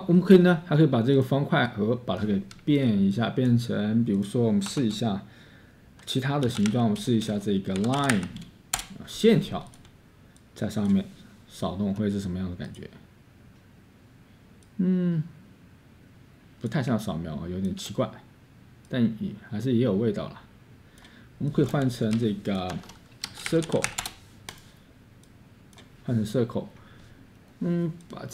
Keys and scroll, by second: 2.6 Escape, 4.6 Tab, 6.3-8.6 typing, 10.6 typing, 22.2 Delete, 22.8-24.5 typing.